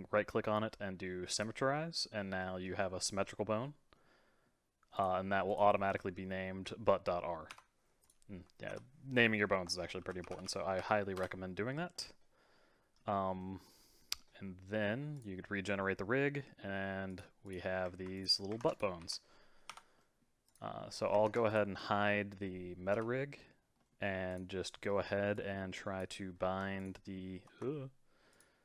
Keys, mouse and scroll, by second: 1.8 middle click, 3.9-4.9 middle drag, 4.9 click, 5.5 click, 5.9 F2, 8.0 click, 8.7 F2, 10.4 l, 11.9-15.1 middle drag, 15.1-15.9 drag, 15.9-17.1 middle drag, 17.1 click, 17.4 click, 18.1 click, 18.6 ctrl+Tab, 18.7 click, 19.0 r, 20.0-20.5 middle drag, 20.5 click, 21.2 ctrl+Tab, 21.5 click, 22.9 h, 23.3-24.3 middle drag, 24.3 click, 24.6 scroll down 1, 24.8-25.3 middle drag, 25.3 click, 26.3-26.8 scroll up 2, 26.8 shift+click, 28.3 shift+click.